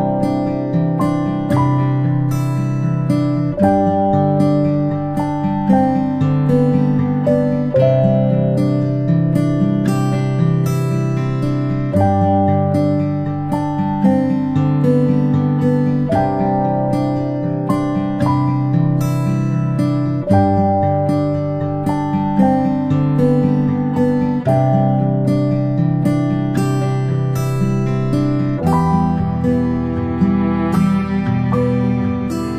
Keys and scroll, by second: 14.4 ctrl+space, 17.0-17.3 space.